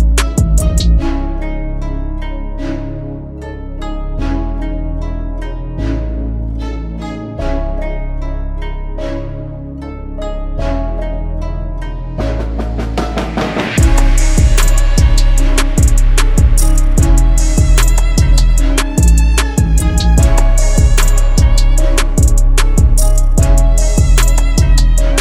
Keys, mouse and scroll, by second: 8.8 shift+click, 12.1 ctrl+z, 14.5 ctrl+z, 14.9 shift+click, 16.0 shift+click, 17.9 ctrl+t, 18.9 alt+shift+click.